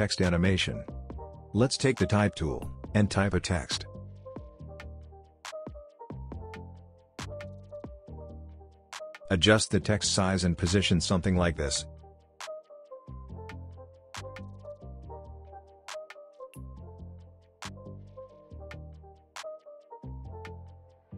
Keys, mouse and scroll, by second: 4.5-6.1 typing, 6.9 click, 8.1 shift+drag, 9.2-10.3 shift+drag, 11.0-11.9 typing, 14.4 y, 15.5 click, 17.9-18.2 alt+scroll up 2, 18.2-21.1 drag.